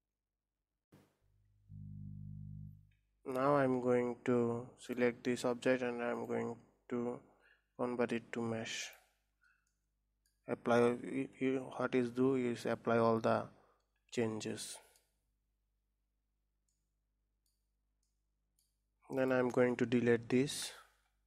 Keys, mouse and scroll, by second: 0.0 scroll down 1, 4.6 click, 5.9-9.0 drag, 9.7-12.6 middle drag, 14.2-17.5 middle drag, 17.5 scroll down 2, 17.9-19.0 middle drag, 19.0 click, 20.4 Delete.